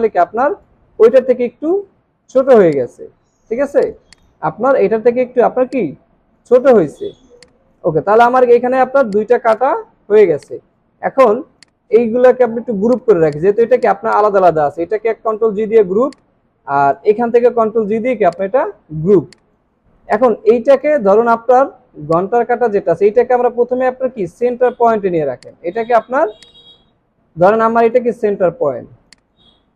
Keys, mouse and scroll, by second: 1.5-1.8 scroll down 1, 2.6 space, 4.1 double click, 7.1 alt+scroll down 1, 7.3 space, 8.5 alt+scroll up 1, 15.5 ctrl+g, 17.9 ctrl+g, 19.1 alt+scroll down 1, 19.3 space, 24.9 alt+scroll up 1, 25.5 space, 27.9-28.3 alt+scroll up 1, 28.6 alt+scroll down 1.